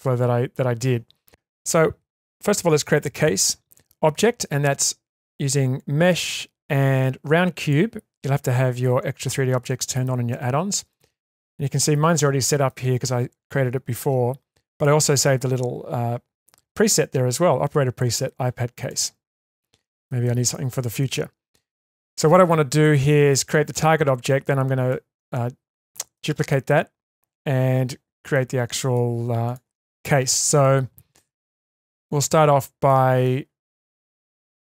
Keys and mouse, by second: 1.6 click, 3.1 shift+a, 9.3-10.1 shift+middle drag, 10.3-10.7 shift+middle drag, 10.9-12.7 middle drag, 14.7-18.4 drag, 18.8 click, 19.6-20.1 middle drag, 20.2-20.8 shift+middle drag, 21.0-22.8 middle drag, 23.1 shift+middle drag, 24.9 middle click, 26.2-26.7 shift+middle drag, 28.3 middle click, 29.5 click, 30.3 click, 30.6-31.8 middle drag, 32.5 Tab, 32.9-33.2 middle drag, 33.8-34.7 middle drag.